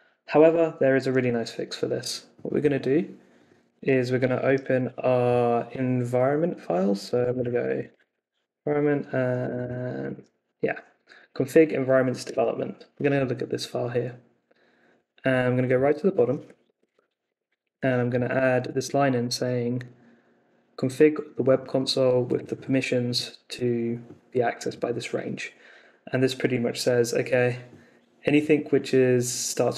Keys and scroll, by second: 4.4 super+t, 7.0-10.6 typing, 12.2 Return, 16.6 shift+o, 16.9 Escape, 17.2 o, 17.6 super+v, 18.0 Escape, 18.7 super+s.